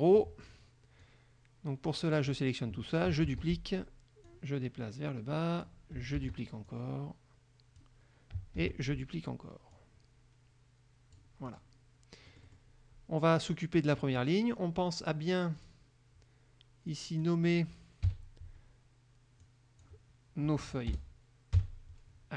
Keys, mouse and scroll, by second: 0.3 click, 1.1-2.5 drag, 3.4 ctrl+d, 4.4-6.0 drag, 6.3 ctrl+d, 6.8-8.1 ctrl+drag, 8.7 ctrl+d, 9.9-11.5 drag, 11.6 click, 12.4 middle click, 15.8 click, 17.1 click, 18.3 KP_2, 19.6 click, 21.1 BackSpace.